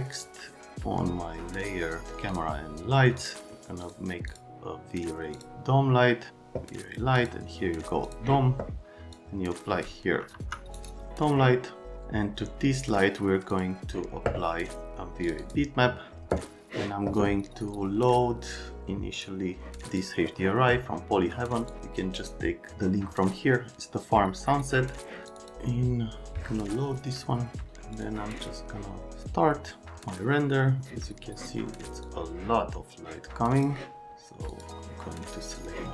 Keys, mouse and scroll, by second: 10.3 F3, 13.5 click, 15.2 click, 15.4 click, 27.9 click, 32.5 click, 34.5 click, 35.5 click.